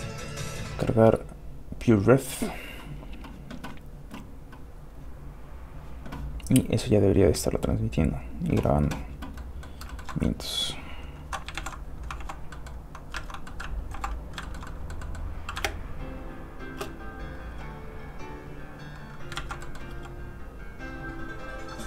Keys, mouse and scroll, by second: 0.7-2.0 right drag, 2.0-3.9 drag, 3.9-5.0 scroll down 1, 9.3 scroll down 1, 9.4 middle click, 9.9 shift+middle click, 10.1 middle click, 10.3-10.8 scroll up 1, 10.8-11.3 scroll down 1, 11.6 alt+shift+h, 12.2 alt+shift+h, 12.5 middle click, 13.2 alt+a, 13.9 alt+m, 14.4 shift+middle click, 14.7 middle click, 14.8 middle click, 15.6 shift+space, 17.5 space, 17.7 click, 19.4 ctrl+z, 19.6 middle click, 19.9 f, 20.1 click.